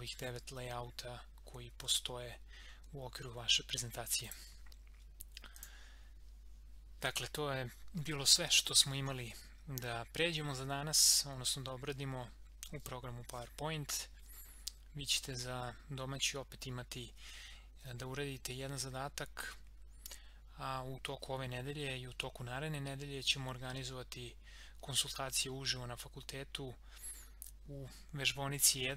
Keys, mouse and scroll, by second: 4.3 click.